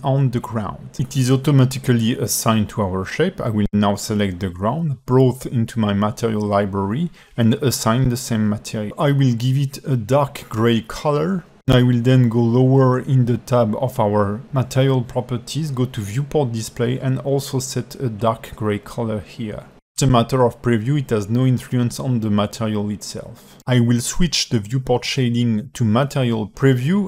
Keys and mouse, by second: 4.9 click, 5.7-8.1 drag, 11.1 click, 15.4 drag, 17.1 drag, 17.7 click, 21.8 alt+middle drag, 22.6 alt+middle click, 26.5 click.